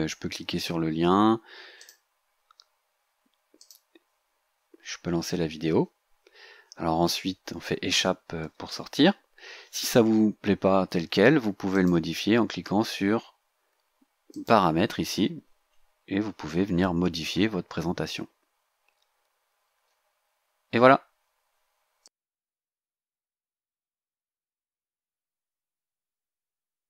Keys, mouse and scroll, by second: 1.8 click, 3.6 click, 8.4 Escape, 8.7 Escape, 11.7 click, 14.3 click, 17.2-18.0 scroll down 4, 19.8 scroll down 2.